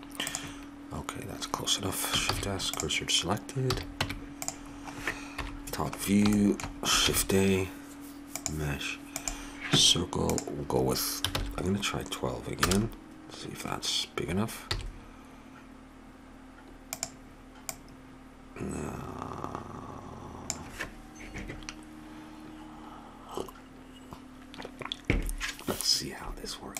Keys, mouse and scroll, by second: 0.3-2.2 drag, 2.3 shift+s, 3.7 a, 4.0 Tab, 5.3 KP_7, 7.0 shift+a, 10.3-11.9 drag, 14.7 s, 17.7-19.4 drag.